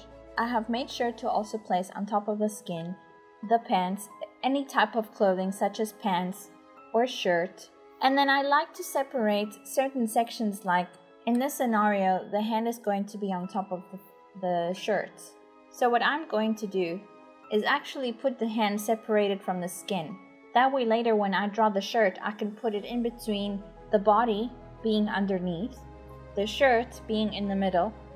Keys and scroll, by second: 6.1 ctrl+Print, 14.9 /, 18.0-19.3 typing, 20.4-21.1 typing, 23.3 typing, 26.3 typing, 27.8 i.